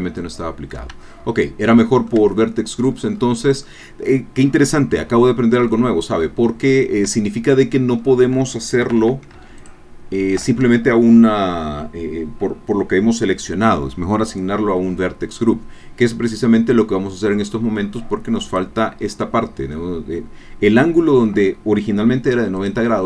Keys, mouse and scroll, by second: 0.9 Tab, 1.5 scroll down 1, 1.6 click, 2.2 Tab, 2.8 scroll up 1, 3.2 scroll down 1, 3.7-5.3 middle drag, 5.7 middle click, 6.6-7.0 scroll up 2, 7.2 Tab, 7.6-8.8 middle drag, 8.8 a, 10.7-11.0 alt+shift+scroll down 4, 18.4 click, 22.6 click.